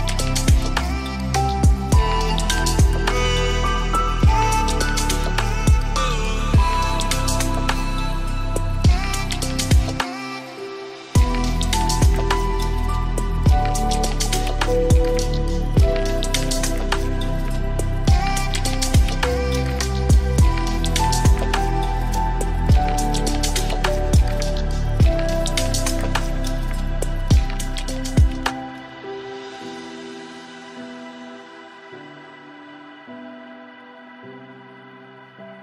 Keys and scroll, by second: 17.3 ctrl+d, 25.9 ctrl+z.